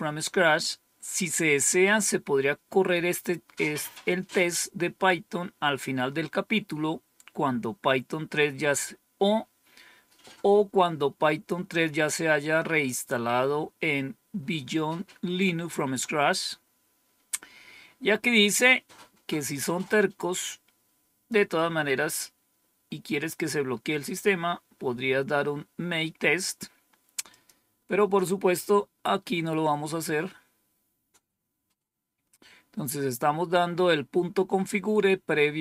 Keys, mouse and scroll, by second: 19.3-21.2 drag, 27.2 click, 31.2-32.1 scroll down 1.